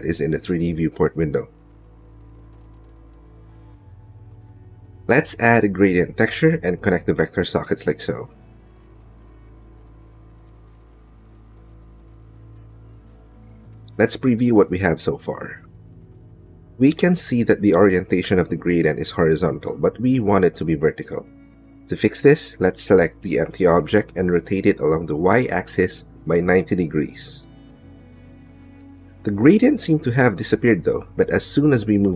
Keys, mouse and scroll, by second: 4.0 click, 6.4 shift+a, 9.8-11.1 drag, 13.2 middle click, 14.2 middle click, 16.9 shift+click, 17.7 click, 19.2 click, 23.2-24.7 middle drag, 29.8-32.1 middle drag.